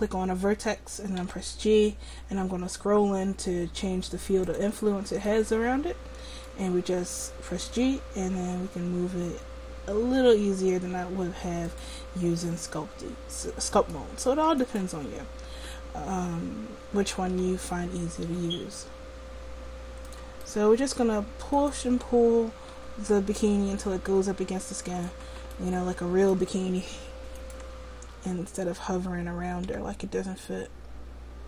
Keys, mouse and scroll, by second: 1.3 g, 7.8 g, 12.5 middle click, 14.6-17.4 right drag, 17.4 g, 21.7-23.6 right drag, 22.8 g, 29.7 g.